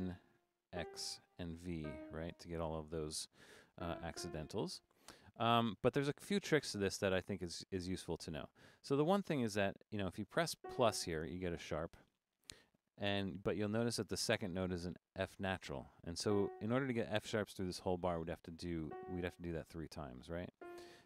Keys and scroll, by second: 0.0-0.7 typing, 1.8 typing, 4.1 typing, 8.5 Up, 8.9 Down, 9.8 Up, 13.4 Right, 13.6 Right, 14.0 Right, 17.5 Right, 17.8 Right, 18.2 Right, 18.5 Right, 20.6 -, 20.8 Left, 21.0 Left.